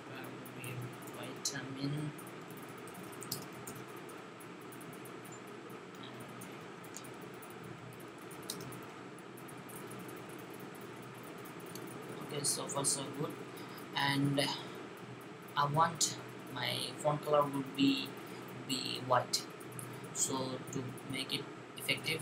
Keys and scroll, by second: 0.0-3.9 typing, 6.2-10.6 typing.